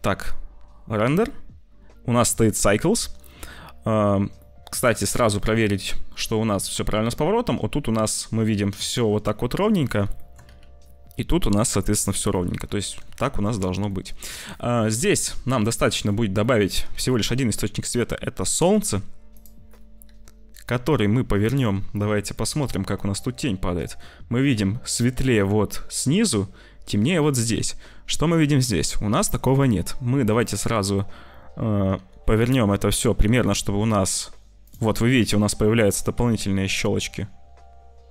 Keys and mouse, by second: 0.0 z, 4.4 middle click, 5.4 middle click, 10.2 shift+click, 10.4 z, 12.4 z, 13.5 ctrl+s, 13.8 shift+click, 15.1 click, 16.4 click, 16.9 shift+a, 19.9 s, 20.0 r, 22.4 middle click, 23.0 middle click, 23.9 middle click, 31.9 r, 35.8 r.